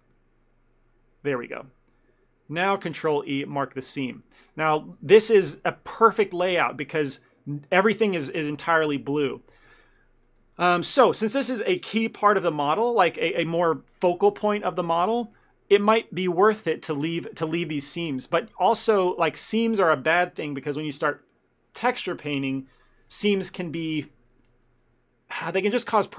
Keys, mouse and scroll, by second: 0.0 ctrl+middle click, 0.2 middle click, 3.0 ctrl+e, 4.5 ctrl+middle click, 4.7 shift+middle click, 5.1 a, 5.2 a, 10.3 middle click, 10.7 ctrl+middle click, 11.0 middle click, 15.6 scroll down 1, 18.9 ctrl+middle click.